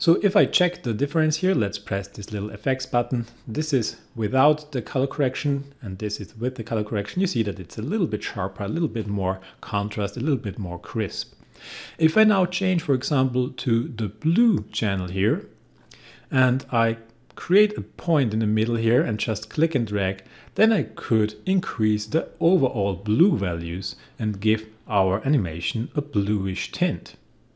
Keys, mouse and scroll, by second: 2.8 click, 5.6 click, 12.3 click, 15.0 click, 18.5-27.5 drag.